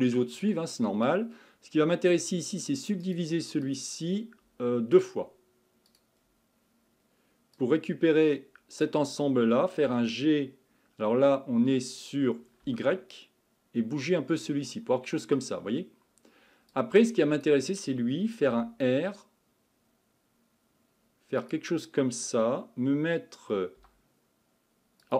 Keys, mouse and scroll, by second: 1.1-3.0 drag, 3.0-5.9 right drag, 5.9 click, 6.6-7.6 scroll up 4, 7.6-9.8 drag, 9.8 g, 16.7 click, 18.5 r, 23.8 g.